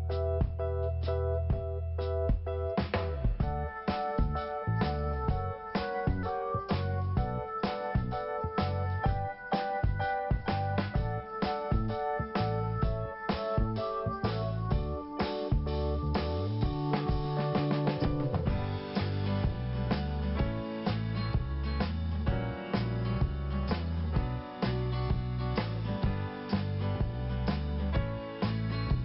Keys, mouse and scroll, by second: 4.9 click, 5.8 scroll up 1, 6.2 click, 9.9 scroll down 1, 11.2 scroll down 1, 11.3 click, 12.9 click, 15.8 click, 17.0 click, 19.6 click, 20.9 click, 22.6 click, 22.7 click.